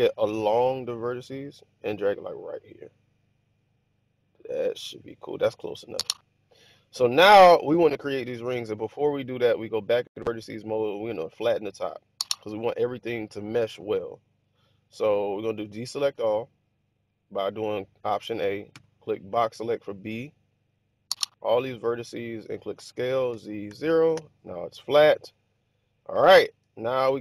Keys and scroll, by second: 15.9 alt+a, 18.6 b, 22.7 s, 23.2 z, 23.5 0, 24.1 Return.